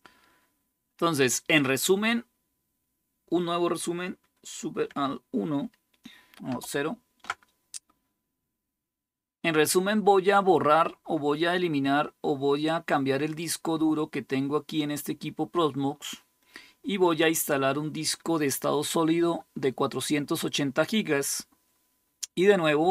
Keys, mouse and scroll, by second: 6.5 alt+super+0.